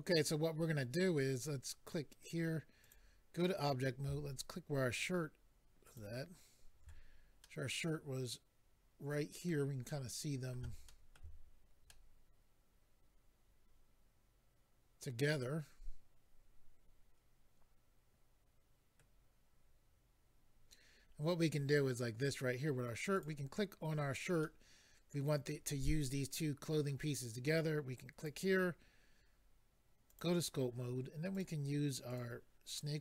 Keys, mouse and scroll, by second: 2.2 click, 2.3 click, 2.8 click, 2.9 click, 5.8 shift+click, 7.4 middle click, 9.9 middle click, 10.9 shift+middle click, 11.2 middle click, 11.9 middle click, 21.0-22.0 scroll up 2, 23.1 click, 23.2 click, 24.4 middle click, 28.2 click, 28.3 click, 30.1 click, 31.3 click, 32.1 click, 32.7 middle click.